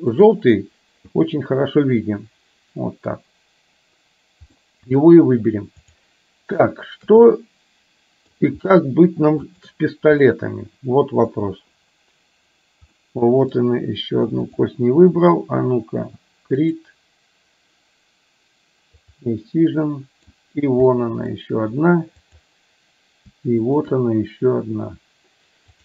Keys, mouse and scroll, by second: 0.2 click, 1.4-3.2 middle drag, 4.7 middle click, 5.9-6.2 drag, 7.4-8.4 middle drag, 9.6 shift+click, 10.4-11.4 middle drag, 13.0 middle click, 17.0 drag, 19.1 click, 19.7 middle click, 21.0 middle click, 22.2 click, 23.7 shift+click.